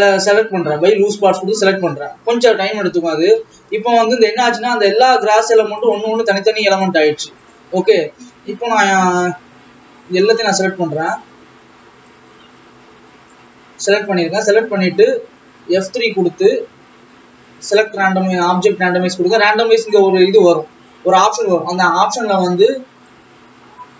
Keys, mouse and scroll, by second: 2.9 Tab, 3.7 alt+a, 4.5-5.7 drag, 6.8 click, 7.6 click, 8.5-9.0 scroll down 1, 9.2 KP_7, 9.9-10.6 scroll down 3, 10.6 click, 12.2-13.7 drag, 13.7-14.4 scroll up 8, 14.4-15.2 scroll down 1, 16.0 F3, 19.9-22.9 drag, 23.2-23.9 drag.